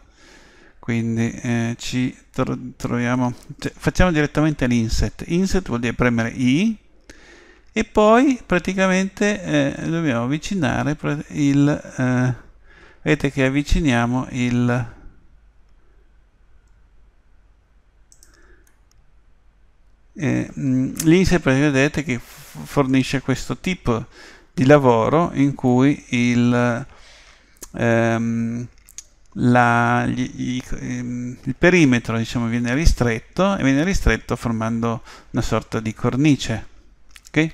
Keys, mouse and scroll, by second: 6.5 i, 18.7-20.6 middle drag, 25.7-27.6 middle drag.